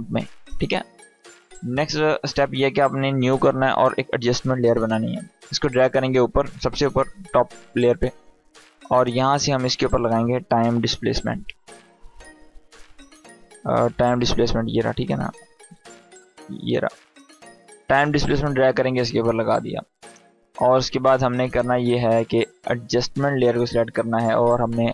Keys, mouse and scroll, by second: 1.6 right click, 3.9-6.3 drag, 9.9-11.1 typing, 15.4 space, 16.0 d, 17.1-18.7 drag.